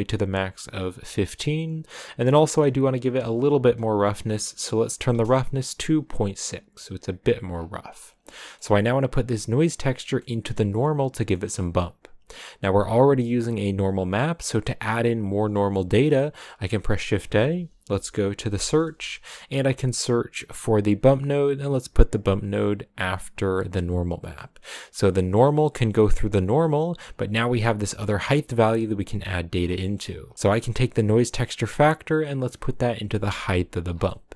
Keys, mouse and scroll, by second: 12.3-20.2 drag, 25.2-28.1 drag, 29.8-31.4 middle drag, 31.4-33.6 drag, 34.1-34.3 middle drag.